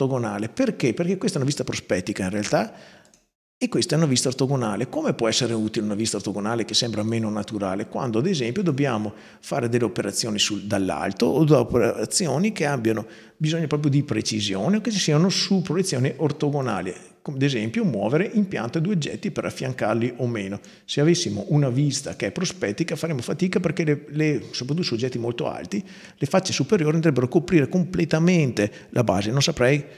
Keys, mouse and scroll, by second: 2.8 click, 5.1 right click, 8.4 click, 15.1 click, 16.4-17.7 drag, 21.8 click.